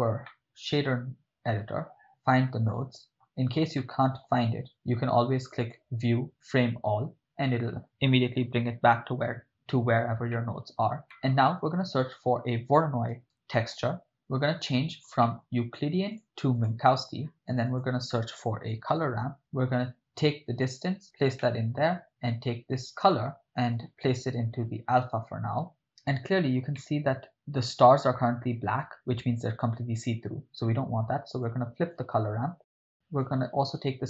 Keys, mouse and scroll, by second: 0.3-2.7 middle drag, 3.1 ctrl+middle click, 3.8 middle click, 5.6-7.1 drag, 10.4 middle click, 11.1 middle click, 11.8 shift+a, 14.0 middle click, 14.6-15.1 ctrl+middle drag, 15.3 middle click, 16.1 click, 17.3 middle click, 17.4 shift+a, 20.6-21.0 drag, 21.4-21.8 middle drag, 23.8-25.6 drag, 26.9-27.5 ctrl+middle drag, 31.4-32.0 drag, 32.5 drag, 32.8 click, 32.9 middle click.